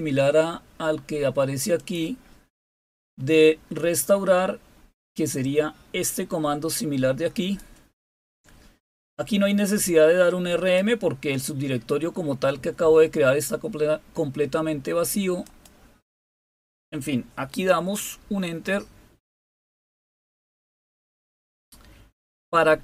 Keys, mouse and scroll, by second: 1.7 click, 2.1 click, 3.2-3.6 scroll down 3, 4.0 scroll down 2, 6.0-7.5 drag, 8.9-10.7 drag, 15.4 click, 16.2 click, 20.1 click.